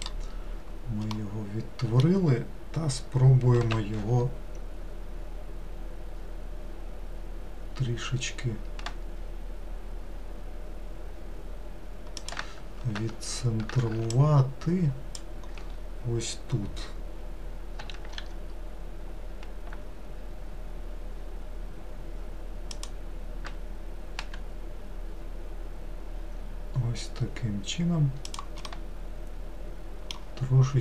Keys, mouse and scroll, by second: 1.2-3.7 middle drag, 3.7 s, 14.2 ctrl+click, 17.9 s, 24.2 g, 28.7-30.8 middle drag.